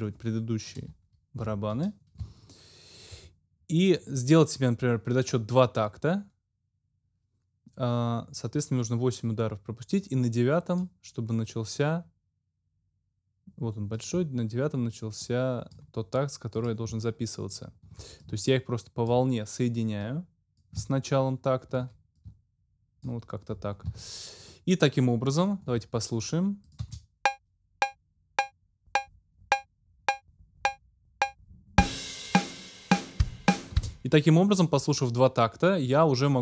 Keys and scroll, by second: 1.4 ctrl+m, 2.2 ctrl+alt+m, 26.8 space, 33.7 space.